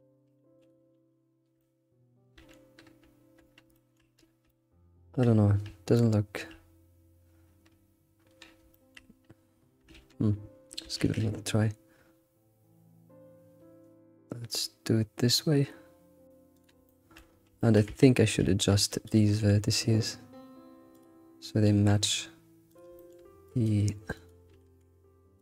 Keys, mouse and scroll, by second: 1.6-4.1 shift+middle drag, 4.1-4.5 scroll down 4, 4.5-8.4 shift+middle drag, 8.4-8.7 scroll up 2, 8.7 shift+middle click, 9.6 scroll up 2, 9.9 ctrl+z, 11.0 ctrl+alt+shift+s, 16.8 shift+middle click, 17.3 scroll up 3, 17.6 shift+middle click, 17.8 Tab, 18.0 Tab, 18.1 scroll up 2, 18.4 alt+x, 18.9 click, 19.4 g, 21.4 click, 21.9 g, 22.9 shift+middle click, 23.4 click, 24.5 g.